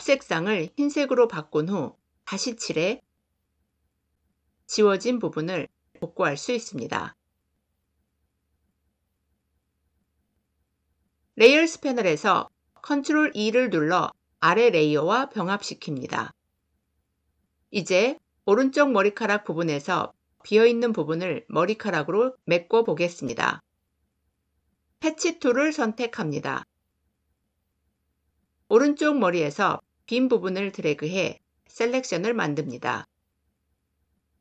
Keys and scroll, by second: 11.3 ctrl+e.